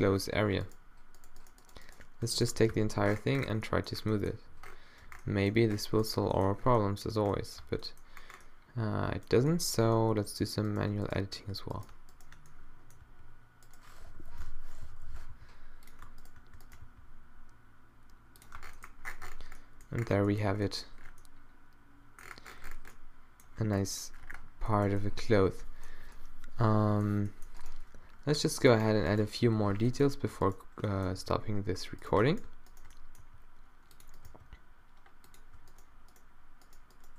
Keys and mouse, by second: 2.7 q, 5.1 Tab, 6.1 middle click, 7.6 Tab, 10.8-12.9 middle drag, 13.0 g, 14.2 o, 14.9 o, 15.3 g, 16.8 g, 18.6 Tab, 18.9 middle click, 21.6 middle click, 23.7 a, 24.3 a, 28.2 Tab, 29.5 -, 29.7 click, 29.9 middle click, 30.0 click, 31.1 right click, 31.2-32.3 drag, 31.2 g, 32.4 click, 33.2 g, 34.3 g.